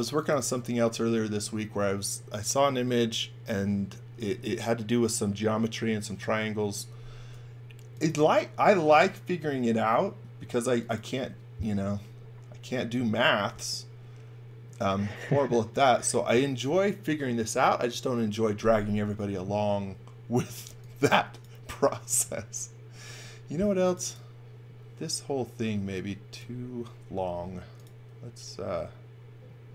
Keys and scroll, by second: 20.1-21.1 typing, 23.0 space, 27.2 m.